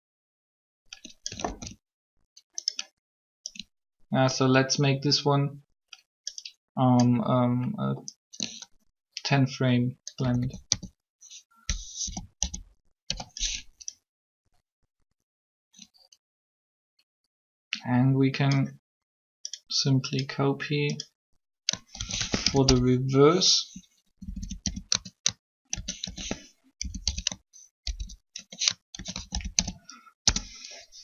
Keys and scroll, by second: 1.4 alt+a, 10.2 a, 10.3 a, 10.7 s, 12.0 =, 12.4 =, 12.9 %, 21.9 shift+s, 23.7 BackSpace, 23.9 BackSpace, 24.6 Caps_Lock, 25.7 shift+s, 26.8-29.1 typing, 30.2 Return.